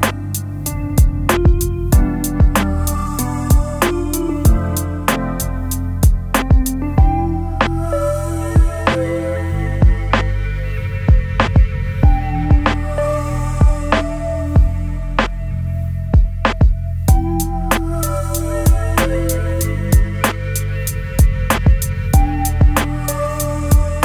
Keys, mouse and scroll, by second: 0.0-1.9 typing.